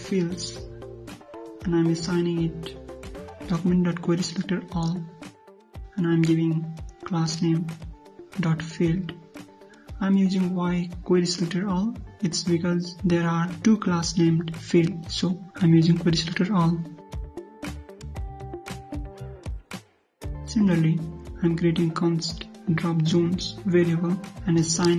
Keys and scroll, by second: 14.1 ctrl+c, 17.5 ctrl+v.